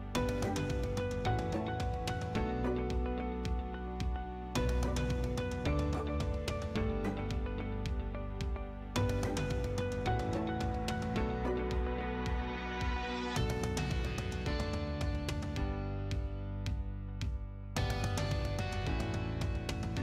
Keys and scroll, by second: 11.3-12.2 typing.